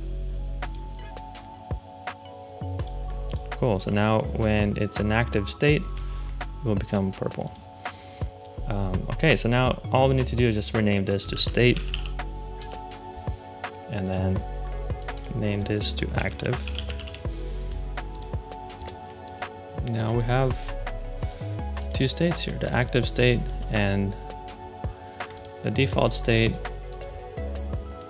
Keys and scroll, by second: 11.2-12.3 typing, 12.5 Return, 15.8-17.3 typing, 22.9 space.